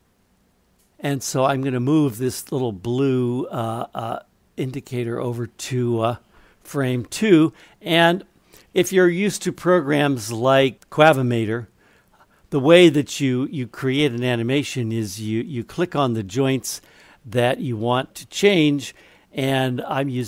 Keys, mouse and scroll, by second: 2.3-5.3 drag, 10.6 middle click, 15.5 click.